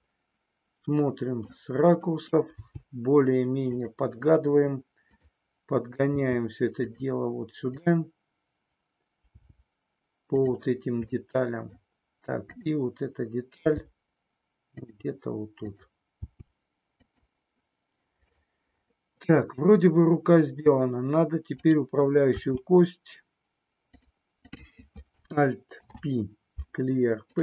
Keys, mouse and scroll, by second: 0.2-1.7 middle drag, 2.6 g, 3.8 click, 5.1 click, 6.2 g, 9.3 g, 11.3 middle click, 12.3 click, 13.7 g, 14.8 click, 15.6 click, 16.2 g, 16.9 click, 19.7-20.8 middle drag, 21.6 click, 22.3 e, 23.9 click, 24.3 click, 25.8 alt+p.